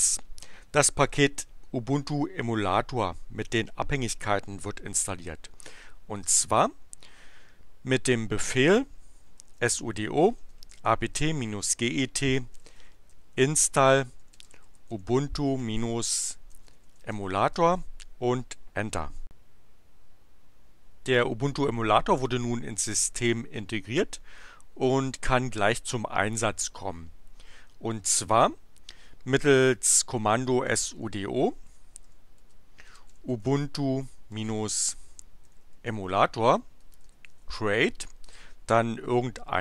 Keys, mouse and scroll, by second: 9.1-17.6 typing, 30.2-38.4 typing.